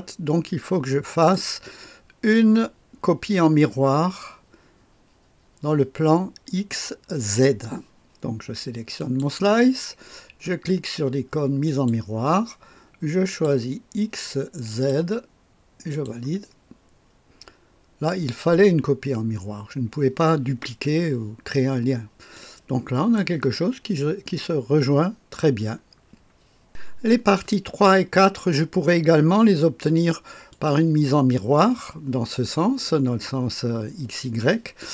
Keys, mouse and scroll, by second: 0.4-1.4 right drag, 8.9 click, 11.6 click, 13.3 click, 14.7 click, 15.9 click, 21.3-22.3 scroll down 2, 22.3 right click, 23.7-25.4 scroll up 2, 25.4-26.5 scroll down 2, 26.7 click, 30.5-31.7 drag, 31.1-32.2 right drag.